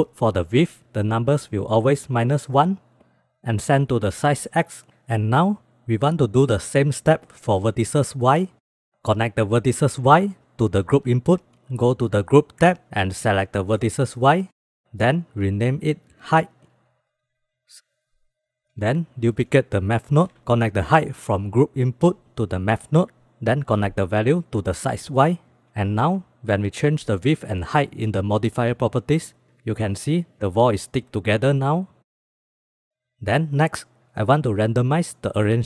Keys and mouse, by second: 1.5-2.3 drag, 5.4-8.4 drag, 9.0-11.3 drag, 13.4 click, 14.5-16.6 drag, 17.9-18.6 drag, 18.8 shift+d, 22.0-23.2 drag, 24.3-25.3 drag, 27.0 click, 28.7 click, 31.5 click, 31.8 click, 32.2 click.